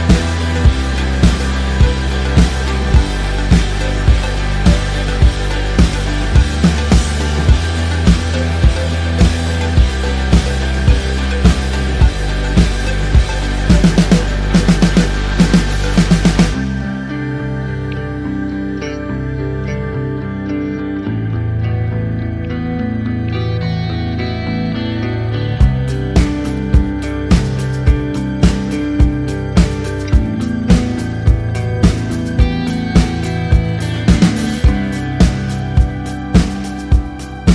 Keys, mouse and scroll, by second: 0.1 click, 0.4 shift+click, 0.8 ctrl+g, 1.4 click, 1.7 typing, 2.1 KP_Enter, 3.2 g, 3.7 click, 4.3-6.6 typing, 7.5 click, 9.3 t, 11.5 click, 13.8-15.4 typing, 16.9-18.2 typing, 18.7 KP_Enter, 19.7 click, 21.2 Return, 23.3 click, 26.0-28.4 typing, 26.3 click, 31.8 click, 32.9 KP_1, 34.8 click, 36.2 KP_3, 36.4 KP_Enter.